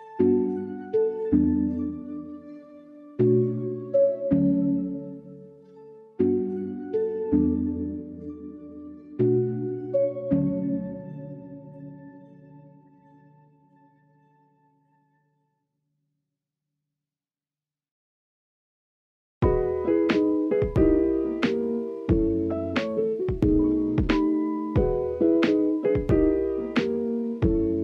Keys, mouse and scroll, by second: 0.1 click, 1.0 middle click, 1.3 shift+middle click, 1.6 Tab, 2.2 click, 4.5 drag, 5.2-6.6 drag, 7.9 KP_3, 9.7-10.9 drag, 10.9 KP_7, 11.7 shift+middle click, 13.0 r, 13.7-14.2 drag, 14.2 KP_3, 15.0 shift+middle drag, 15.3-15.7 drag, 15.7 alt+z, 16.1 click, 18.0 r, 18.7 click, 19.2 click, 19.9 r, 20.3 click, 20.7 click, 20.9 click, 21.2 r, 21.7-22.2 middle drag, 22.2-22.6 scroll up 1, 22.6-23.0 middle drag, 25.4-26.5 drag, 27.2-27.6 middle drag.